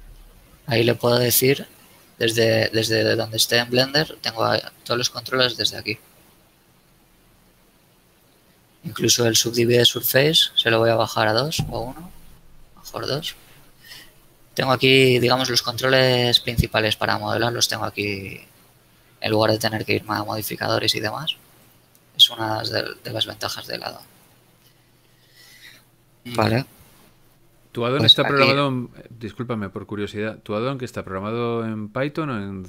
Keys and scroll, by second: 23.1 a, 27.9 shift+Tab, 29.8 ctrl+Tab.